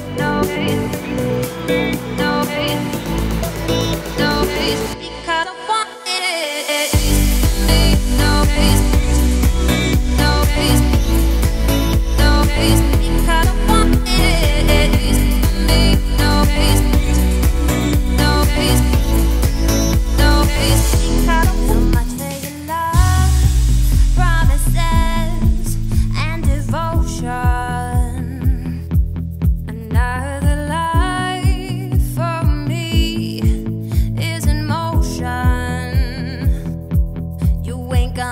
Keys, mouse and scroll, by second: 0.6-1.5 scroll down 2, 1.5-2.3 scroll up 3, 2.3 click, 3.7-4.0 scroll down 4, 4.0 middle click, 4.4-4.9 scroll up 5, 4.9 shift+middle click, 5.3 click, 5.5 scroll down 1, 5.6 middle click, 6.5 g, 9.1 `, 9.7 z, 10.1 shift+middle click, 10.3-10.8 scroll up 4, 10.8 g, 12.8 ctrl+r, 14.8 click, 16.0 3, 16.3 click, 17.1-18.4 scroll down 2, 18.4 e, 19.9 z, 20.4 scroll down 4, 20.6 `, 21.5-21.8 scroll up 2, 21.8 shift+middle click, 22.3-23.3 scroll up 2, 23.3 g, 25.6-26.4 scroll up 2, 26.4 click, 26.7-27.1 scroll down 3, 27.1 shift+middle click, 27.7-28.4 scroll up 4, 28.4-29.1 scroll down 2, 29.1 click, 29.6 `, 29.9-31.0 middle drag, 31.0 shift+click, 31.6 x, 32.5 `, 33.6 click, 34.4-34.8 scroll up 1, 34.8 3, 35.2 click, 35.6 shift+click, 35.9 shift+click, 36.2-36.7 scroll up 2, 36.7 i.